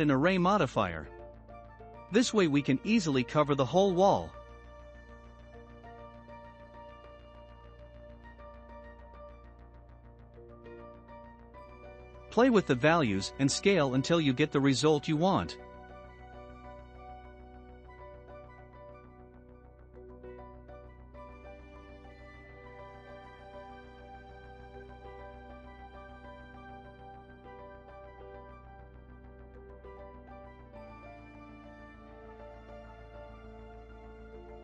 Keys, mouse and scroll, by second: 0.1 click, 2.8-11.0 drag, 11.3 scroll up 2, 11.9-13.1 shift+middle drag, 13.1-13.5 scroll up 2, 13.5-15.2 shift+middle drag, 15.2-20.6 shift+drag, 20.6-21.3 scroll down 2, 21.3-22.8 shift+middle drag, 21.3 scroll down 2, 22.8-26.4 drag, 26.4-29.4 shift+middle drag, 29.9-30.6 middle drag, 31.9 click.